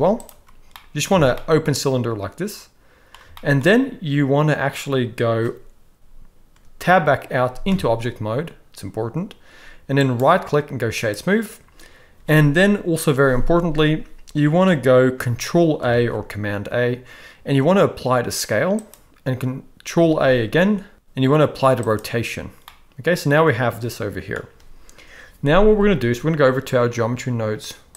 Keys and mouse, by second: 0.8 middle click, 1.1 a, 1.4-3.1 middle drag, 3.3 shift+middle click, 7.6 Tab, 10.0-11.1 right drag, 15.8 ctrl+a, 20.2 ctrl+a, 22.6-24.3 middle drag.